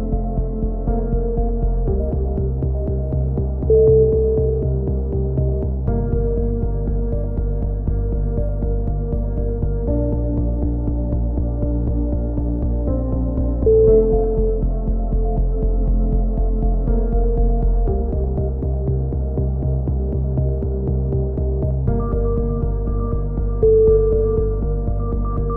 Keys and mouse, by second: 0.9 f, 1.1 a, 1.2 middle drag, 1.4-1.9 drag, 2.8-3.9 drag, 4.7 ctrl+l, 4.9 h, 5.4 KP_1, 5.6 drag, 5.9 KP_7, 6.7 drag, 7.1 z, 9.3 Tab, 9.6 z, 10.4 Tab, 10.9 k, 12.7 a, 13.3 k, 15.1 a, 17.2 k, 18.9 a, 20.3 k, 24.6 KP_3, 24.9 z, 25.0 middle drag, 25.3 a.